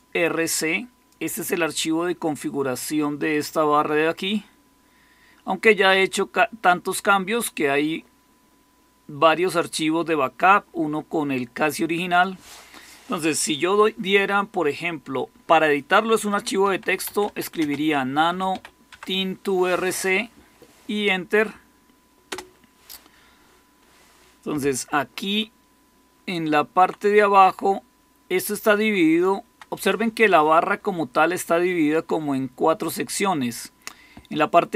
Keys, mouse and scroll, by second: 16.3-18.9 typing, 22.2 Return, 25.7-26.8 Down, 27.3-28.4 Down, 28.7 Down, 29.0 Down.